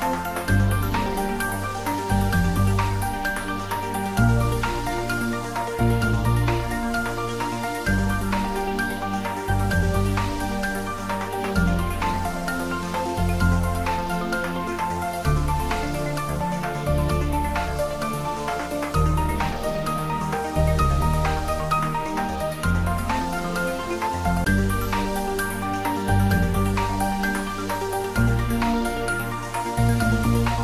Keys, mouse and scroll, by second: 0.0-1.1 typing, 5.4 click, 6.1-7.2 scroll down 1, 7.2 middle click, 7.7-8.2 scroll up 1, 8.2 middle click, 8.9-9.5 scroll up 1, 9.5 g, 16.3 click, 16.7-17.6 typing, 20.1 x, 20.2 click, 20.9 g, 21.3 x, 22.7 Left.